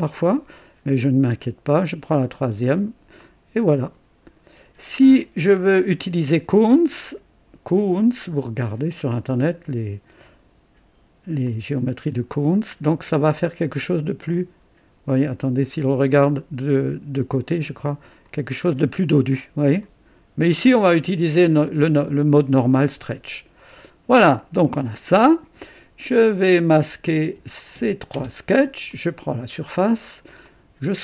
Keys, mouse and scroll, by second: 2.0 click, 3.2-5.4 drag, 5.5 scroll up 2, 6.3 right click, 7.0 click, 10.2 click, 11.4-13.1 drag, 14.3 click, 15.4 click, 16.2 click, 18.2 click, 19.8 click, 23.5 click, 24.3 click, 26.2 click, 27.0 shift+click, 28.1 shift+space, 28.8 click.